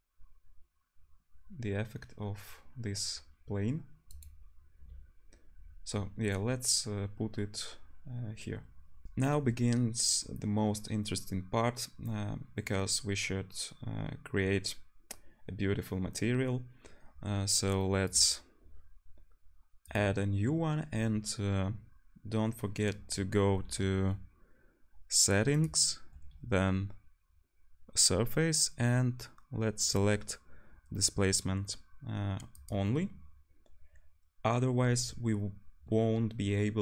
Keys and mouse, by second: 9.0 ctrl+shift+F1, 21.2-36.8 drag.